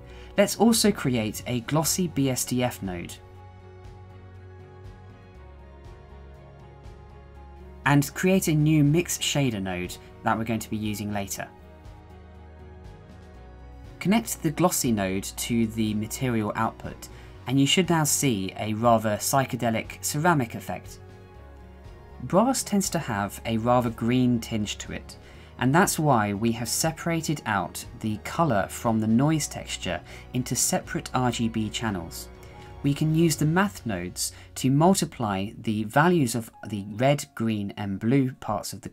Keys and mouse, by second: 0.1 shift+a, 1.2 s, 2.6 click, 3.7 click, 4.4 shift+middle click, 4.7-5.7 drag, 6.5 middle click, 7.4 click, 8.0-9.5 drag, 9.7 shift+middle click, 10.7 shift+a, 12.1 BackSpace, 14.9 click, 16.1 shift+middle click, 17.2 shift+middle click, 18.2 shift+middle click, 19.2 shift+middle click.